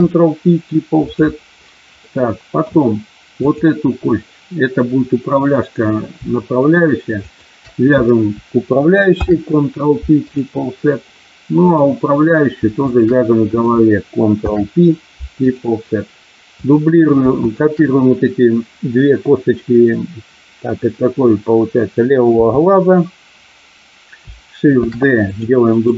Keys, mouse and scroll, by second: 2.0 middle click, 3.4 click, 7.2 shift+click, 9.1 ctrl+p, 11.6 click, 12.9 shift+click, 14.4 ctrl+p, 17.4 shift+click, 22.3 KP_7, 24.8 shift+d, 25.3 click, 25.6-25.9 right drag.